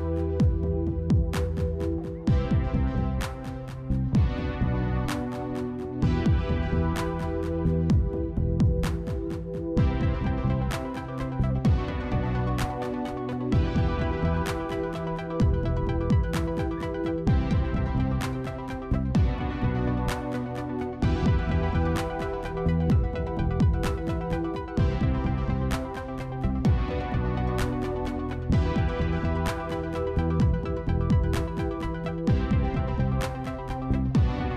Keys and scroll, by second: 0.0 i, 0.1 alt+x, 15.5 ctrl+z.